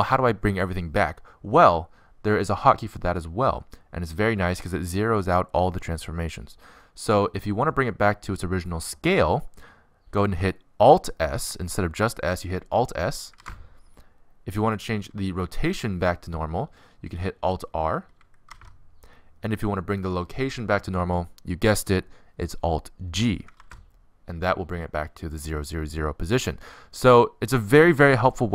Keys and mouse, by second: 0.5 middle click, 13.8 alt+s, 18.4 alt+r, 24.0 alt+g.